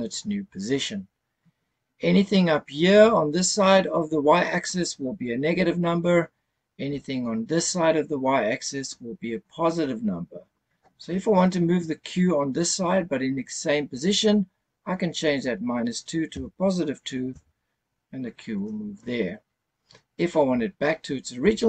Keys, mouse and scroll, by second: 15.2-17.3 drag.